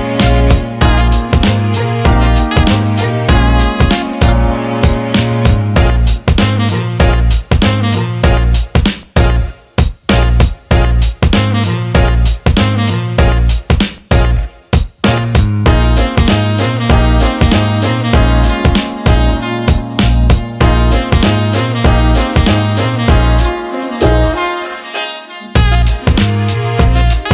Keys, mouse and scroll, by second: 7.0-8.6 drag, 11.8-14.5 drag, 15.9 click, 17.4 ctrl+z, 20.7-22.0 drag, 23.4-25.8 drag.